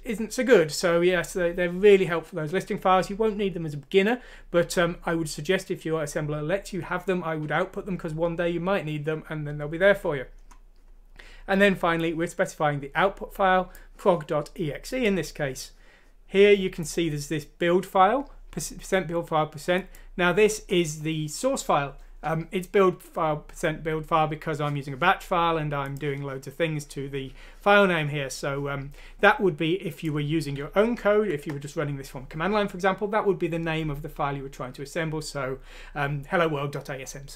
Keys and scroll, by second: 31.1 End.